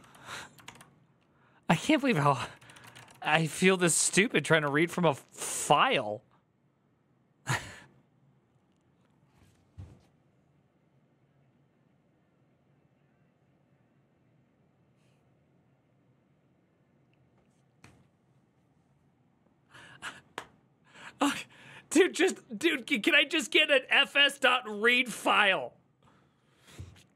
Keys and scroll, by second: 0.4 ctrl+d, 1.8 ctrl+w, 1.9-3.4 typing, 2.1 ctrl+w, 2.2 ctrl+o, 2.3 ctrl+c, 5.5 alt+{.